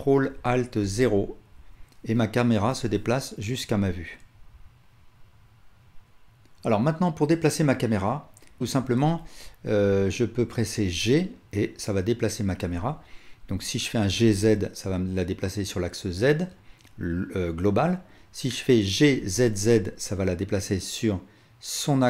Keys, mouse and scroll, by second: 0.8 ctrl+alt+KP_0, 10.8 g, 14.1 g, 18.9 g.